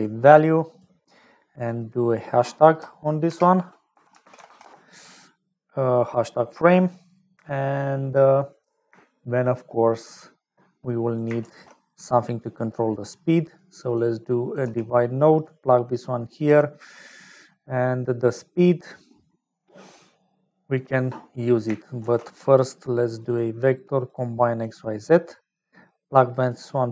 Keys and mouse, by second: 0.0 shift+a, 1.5 click, 2.0-5.5 drag, 6.6 middle click, 7.7 middle click, 11.2 click, 11.4 shift+a, 14.4 click, 15.6 click, 20.1 middle click, 21.2 middle click, 22.0 shift+a, 25.5 click.